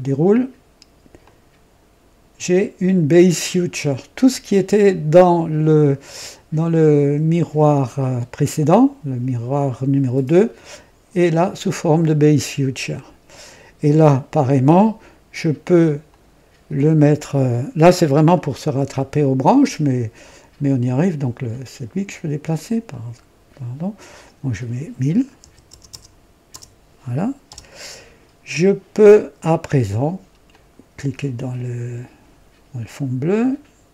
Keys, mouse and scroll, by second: 1.1-1.9 drag, 3.8 click, 15.6 click, 16.2 click, 18.2 click, 20.7 click, 22.4 click, 23.0 click, 24.1 click, 25.3 KP_1, 25.6 KP_0, 25.8 KP_0, 26.4 KP_0, 27.4 Return, 27.6 Return, 30.4 click.